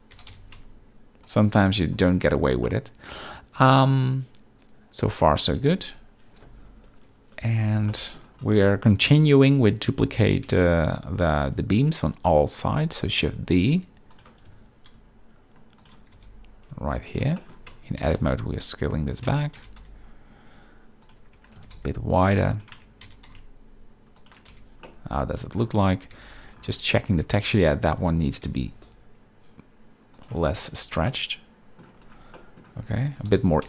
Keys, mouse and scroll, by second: 0.1 g, 0.3 y, 1.2 shift+click, 1.5-1.9 middle drag, 2.6-5.2 middle drag, 7.0 KP_7, 7.9 shift+middle click, 7.9 shift+scroll, 10.4 z, 13.2 shift+d, 14.5 r, 16.1 g, 17.1 shift+drag, 17.4 shift+middle click, 17.7 Tab, 18.0 s, 18.1 x, 19.0 click, 19.3 Tab, 19.6 g, 19.8 x, 21.3 Tab, 21.6 s, 21.7 x, 22.5 click, 22.7 Tab, 23.0 g, 23.3 x, 24.5 z, 24.8-25.5 middle drag, 26.1 z, 27.2 Tab, 28.0 s, 28.4 y, 30.4 Tab, 31.1-31.8 middle drag, 32.3 middle click, 33.2 g, 33.4 y.